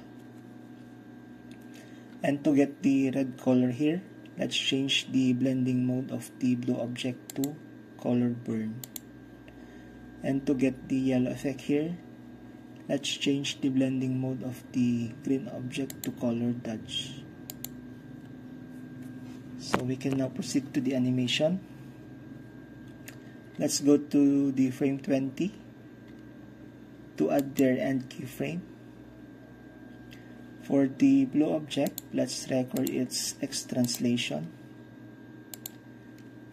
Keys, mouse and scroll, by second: 7.3 middle click, 7.8-9.8 drag, 16.0-17.3 drag, 17.6-18.8 drag, 27.5-29.3 drag, 31.9-33.8 drag, 33.9-34.3 drag, 34.3-35.6 middle drag, 34.3-35.0 scroll down 1, 35.0-35.6 scroll down 1, 35.6-36.2 drag, 36.2-36.5 middle drag, 36.2-36.5 scroll down 1.